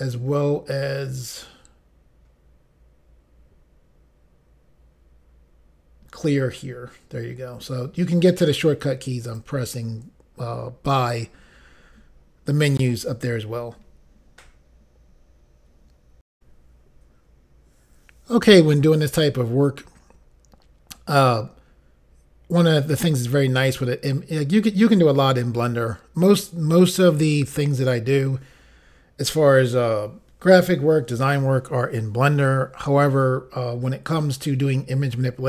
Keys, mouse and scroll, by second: 9.2 click, 16.3 Insert, 16.6 Pause.